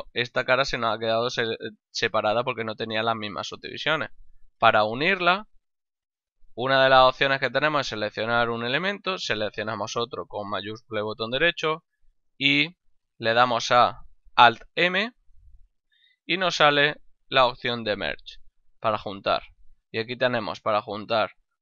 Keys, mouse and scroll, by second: 0.9 middle click, 5.0 middle click, 6.7 shift+right click, 14.9 alt+m.